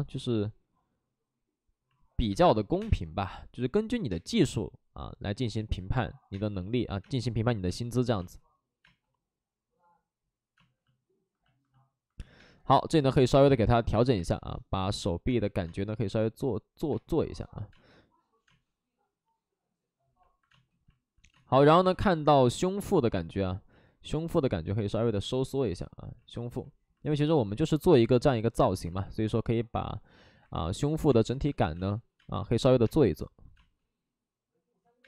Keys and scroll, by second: 2.3 space, 2.7 3, 2.7 space, 3.9 ctrl+z, 4.0 space, 5.3 ctrl+z, 6.3 space, 6.5 ctrl+z, 7.0 space, 13.3 ctrl+z, 14.1 space, 25.2 space, 28.8 ctrl+z, 30.5 space, 31.7 space, 32.1 space.